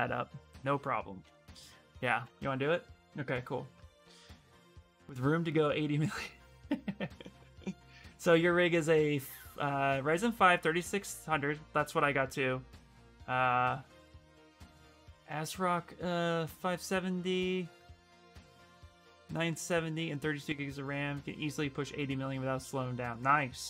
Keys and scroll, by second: 1.0 ctrl+s, 1.7 Return, 2.0 Return.